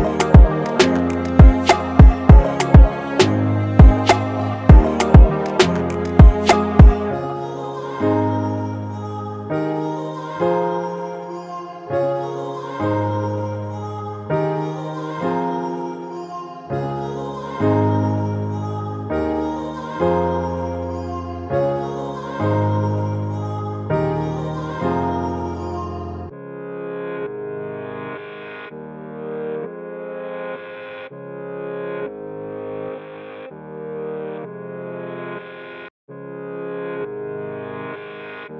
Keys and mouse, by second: 4.5 click, 6.2-18.7 drag, 23.4 click, 25.0 click, 26.7 click, 28.5-32.9 drag, 33.7 Down, 36.2-38.5 alt+drag.